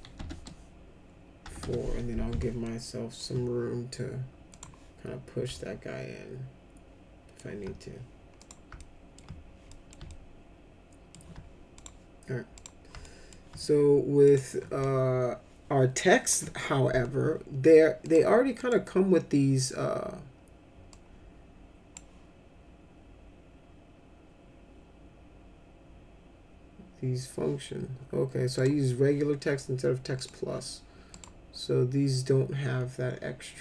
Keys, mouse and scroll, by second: 0.2 BackSpace, 1.4 4, 1.6 Return, 2.6 alt+middle click, 4.5 click, 5.5-7.3 alt+middle drag, 8.4 click, 8.7 alt+middle click, 9.7 middle click, 10.1-11.1 alt+middle drag, 11.7 click, 12.5 click, 13.0 alt+middle click, 14.2 click, 18.0 click, 18.5 click, 20.9-21.9 drag, 28.5 click, 30.2 click, 31.1 click.